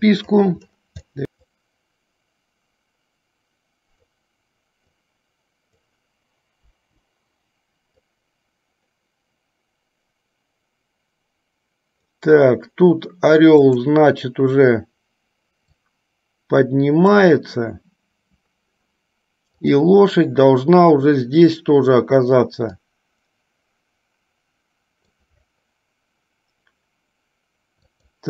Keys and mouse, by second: 0.1 click, 1.2 i, 1.6-4.4 drag, 5.1-5.9 drag, 6.8 Delete, 8.3-12.3 drag, 16.1-17.5 drag, 19.8 click, 23.1-25.5 drag, 27.9 click.